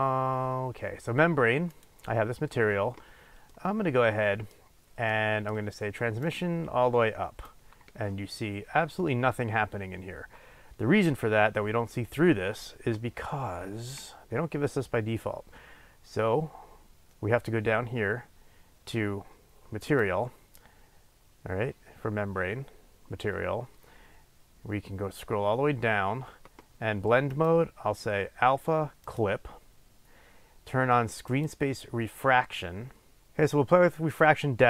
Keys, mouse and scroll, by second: 1.7 click, 3.5-6.2 middle drag, 6.2-20.4 drag, 24.2-24.5 scroll down 1, 27.2-31.9 drag, 33.3-34.6 drag.